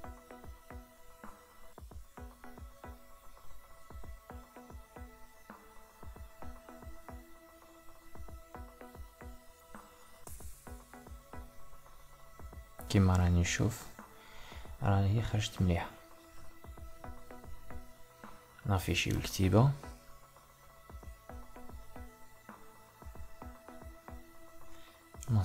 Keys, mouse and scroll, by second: 1.4 Tab, 5.6 s, 7.2 Tab, 9.4-13.6 ctrl+middle drag, 14.0 click, 14.8-17.7 middle drag, 17.7 click, 19.6-22.6 middle drag, 24.1 click.